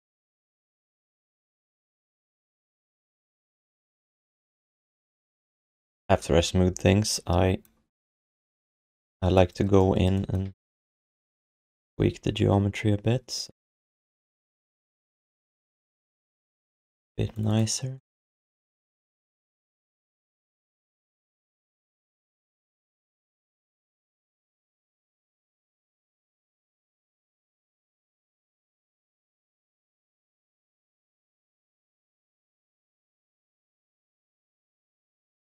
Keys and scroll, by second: 1.9 q, 5.4 q, 6.0 alt+shift+d, 6.3 ctrl+s, 11.9 q, 15.6 q, 24.2 q, 27.1 q, 28.5 g, 28.8 g, 31.7 q.